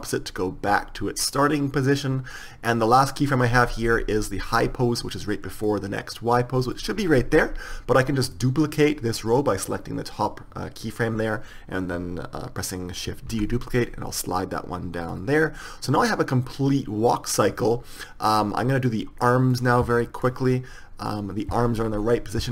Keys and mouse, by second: 6.1-13.6 drag, 13.6 shift+d, 15.7-17.4 drag, 20.5-22.5 drag.